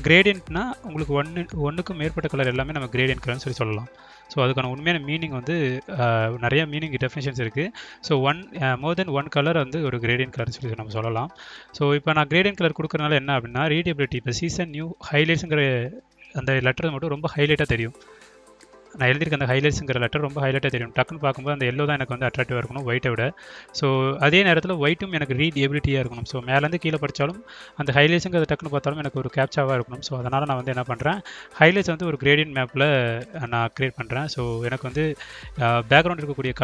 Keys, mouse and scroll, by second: 2.7 click, 3.7 click, 6.1 click, 7.5 click, 7.6 click, 8.7 click, 11.2 click, 12.1 click, 14.9 click, 16.1 click, 17.2 click, 18.5 click, 18.7 click, 20.1 click, 20.9 click, 22.0-22.4 drag, 23.2 click, 23.9 click, 25.3 click, 27.0 click, 29.0 click, 30.3 click, 31.1 click, 31.2 click, 32.2 click, 32.7 click, 34.6 click, 35.5 click, 36.2 click.